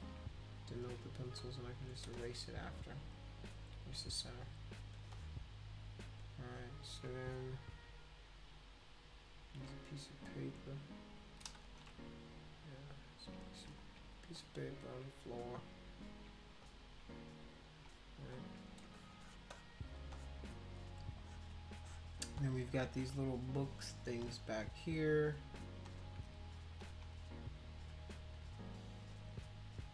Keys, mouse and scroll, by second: 0.8 click, 1.4 shift+click, 2.1 space, 2.1-4.9 drag, 5.1-6.2 drag, 6.6 click, 9.4 click, 10.1 shift+click, 11.6 ctrl+z, 13.8 click, 14.3 shift+click, 16.6 shift+click, 17.5 click, 18.3 shift+click, 18.8 space, 18.9 click, 19.5 click, 20.1-22.2 drag, 22.4 click, 23.8 click, 24.6 shift+click, 25.9 shift+click, 26.8 click, 27.1 shift+click, 27.6 shift+click, 28.1 click, 28.3 click, 28.8 click, 29.1 click, 29.3 click.